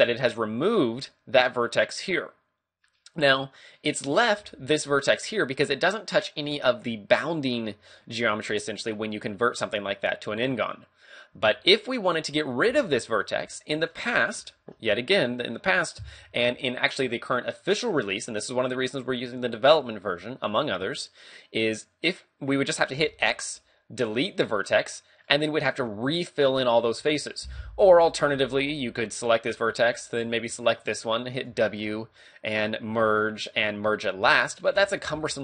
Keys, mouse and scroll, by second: 2.3-2.9 scroll down 2, 2.8 middle click, 4.1 right click, 4.4 g, 5.2 right click, 11.3 a, 11.6-12.4 scroll up 1, 12.4 right click, 12.7 g, 13.2 right click, 13.6 shift+middle click, 14.5 shift+middle click, 23.0 x, 24.8 middle click, 27.0 ctrl+z, 27.7 a, 29.2 right click, 30.7 shift+right click, 31.5 w, 34.7 ctrl+z, 35.3 a.